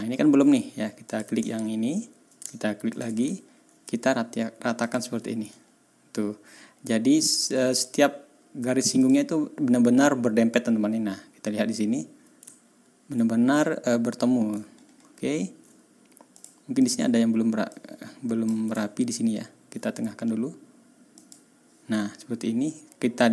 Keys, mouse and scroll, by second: 1.0 click, 1.4 ctrl+scroll down 2, 2.9 shift+click, 3.3-3.6 ctrl+shift+scroll up 3, 4.8 middle click, 5.5-6.0 ctrl+scroll up 2, 6.2-6.5 ctrl+scroll down 2, 6.6 ctrl+scroll up 2, 7.7 middle click, 9.0 middle click, 12.6-12.9 ctrl+scroll up 2, 14.6-15.6 ctrl+scroll down 2, 16.3 click, 16.8 click, 17.7 click, 19.0 ctrl+scroll up 2, 21.1 click, 22.2 ctrl+scroll down 2, 22.5-23.0 ctrl+scroll up 2.